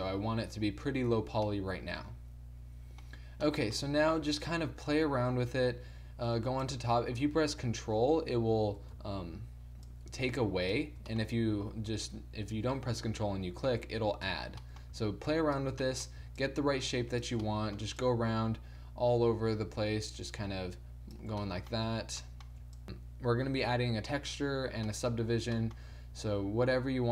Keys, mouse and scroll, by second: 4.5-10.0 middle drag, 11.2-13.1 middle drag, 14.7 middle click, 15.4 middle click, 16.1-19.9 drag, 21.5-26.3 middle drag, 26.3-27.1 drag.